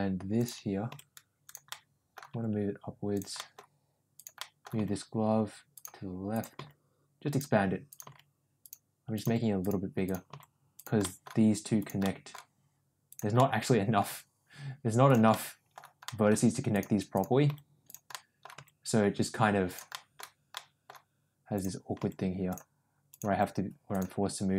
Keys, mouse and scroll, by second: 0.8 g, 1.7 middle click, 2.2 g, 3.3 middle click, 4.3 middle click, 4.7 g, 6.4 g, 7.8 click, 8.0 g, 9.0 click, 9.2 g, 10.2 g, 11.1 middle click, 11.7 click, 11.9 middle click, 13.3 middle click, 14.0 g, 15.3 middle click, 16.0 middle click, 17.4 g, 18.0 middle click, 18.5 g, 19.9 middle click, 20.5 middle click, 21.9 g, 23.2 g, 24.4 click.